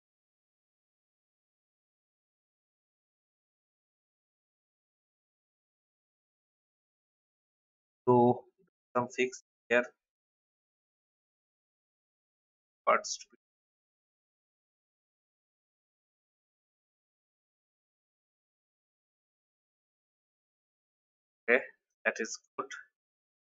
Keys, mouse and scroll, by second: 0.1 Down, 1.0 alt+scroll down 1, 2.5 shift+click, 6.2 alt+scroll up 1, 8.3 n, 9.2-12.6 drag, 13.0-13.3 alt+scroll down 1, 14.2 alt+scroll up 1, 15.4-19.4 drag, 19.6-19.9 alt+scroll down 1, 20.6 alt+scroll down 1, 21.4 alt+v, 21.9-23.4 drag.